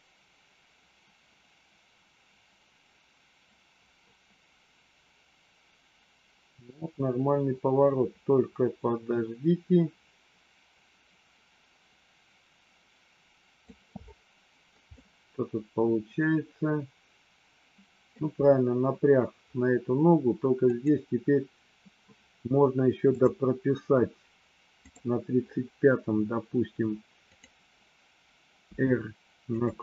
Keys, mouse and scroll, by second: 14.8-18.1 middle drag, 20.6 click, 23.1 click, 24.8 click, 27.3 click, 28.7 r.